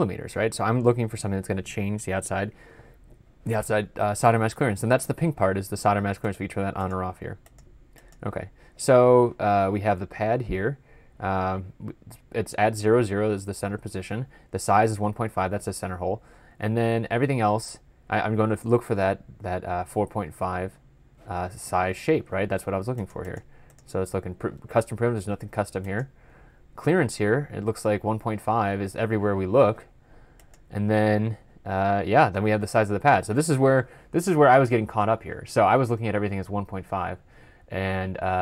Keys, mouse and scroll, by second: 34.1 double click, 34.2 ctrl+F12, 34.3 ctrl+F11.